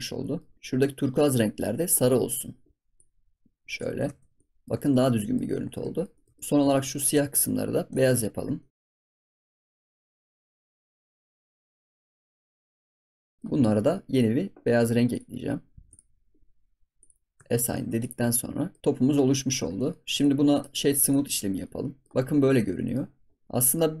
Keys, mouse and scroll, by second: 0.0 scroll down 1, 0.2 middle click, 0.5 scroll up 2, 0.5 ctrl+s, 1.3 click, 2.2 click, 4.0 ctrl+s, 4.1 scroll down 3, 4.3-4.7 middle drag, 4.7 ctrl+s, 4.9-5.4 middle drag, 5.4 scroll up 3, 5.6 ctrl+s, 5.9-6.2 shift+middle drag, 6.2 ctrl+s, 6.3 middle drag, 6.7 shift+middle drag, 6.9 scroll down 1, 7.3 click, 7.6 scroll up 2, 7.9 click, 8.1 Tab, 8.5 shift+middle click, 8.8 click, 8.8 scroll up 2, 8.9 middle click, 9.3 click, 9.6 ctrl+s, 9.6 middle click, 9.9 shift+click, 10.5 ctrl+s, 10.6 middle click, 11.1 scroll up 1, 11.1 middle click, 11.8 shift+click, 12.1 ctrl+s, 12.2 middle click, 12.7 shift+click, 13.0 ctrl+s, 13.0 scroll down 3, 13.1 middle click, 13.2 scroll up 2, 13.3-14.1 shift+middle drag, 14.1-15.9 drag, 16.9 click, 17.3 Tab, 17.4 scroll down 4, 17.7 ctrl+s, 18.0 click, 18.2-19.2 middle drag, 19.2 scroll up 1, 19.5 ctrl+s, 19.7-20.1 middle drag, 20.1 drag, 20.5-21.3 right drag, 21.3 scroll down 1, 21.6-22.1 middle drag, 22.1-22.6 scroll down 9, 22.7 middle click, 23.0-23.3 scroll up 12, 23.4-24.0 middle drag.